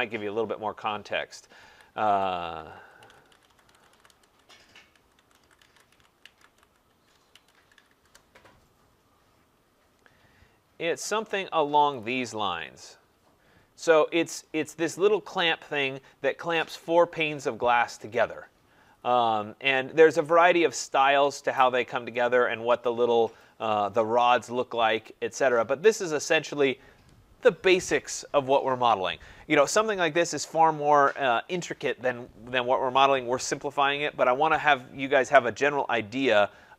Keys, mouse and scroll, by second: 1.2-5.9 typing, 1.6 click, 7.3-8.9 typing, 10.6-11.3 typing, 12.6 typing, 14.0 middle click, 14.0 click, 19.3 scroll, 21.1 scroll, 22.9 click, 36.4 click.